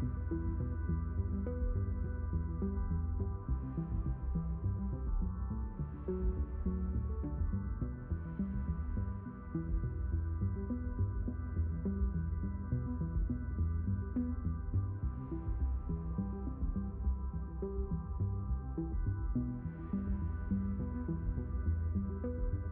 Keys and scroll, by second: 6.5 3, 7.3 Return.